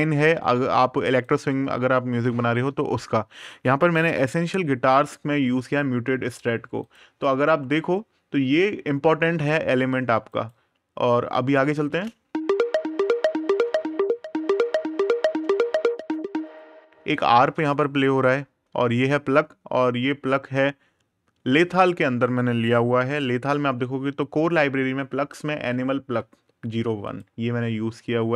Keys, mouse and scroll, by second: 1.0 click, 3.9 super+KP_Add, 5.6 super+KP_Subtract, 6.6 click, 10.1 right click, 11.6 space, 15.7 space, 16.2 click, 21.3 click, 23.0 super+KP_Add, 25.7 super+KP_Subtract, 26.8 click.